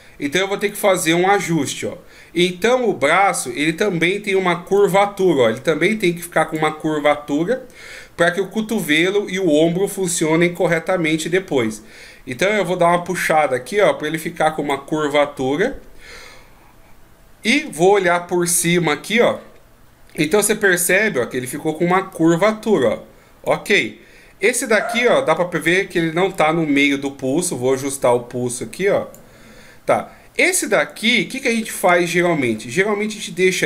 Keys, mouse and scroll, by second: 0.6 right click, 4.7 d, 4.8 click, 6.6-7.0 d, 7.0 right click, 10.6 d, 12.4 click, 18.6 KP_7, 22.1 click, 22.1 d, 23.5 d, 24.7 right click, 26.3 click, 30.8 right click.